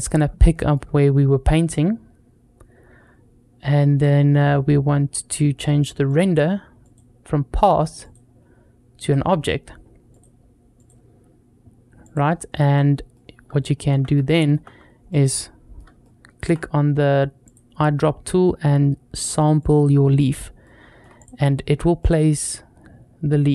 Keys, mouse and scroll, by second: 0.2-0.6 shift+middle drag, 2.8-3.1 scroll up 2, 5.3-5.9 scroll down 1, 5.9 click, 6.7-7.4 drag, 7.8-8.9 drag, 9.9-12.0 drag, 13.0-14.0 middle drag, 14.2 middle drag, 14.9-15.6 middle drag, 15.8-16.2 shift+middle drag, 17.3 click, 20.4-20.8 shift+middle drag, 21.0 click, 21.8-23.5 middle drag.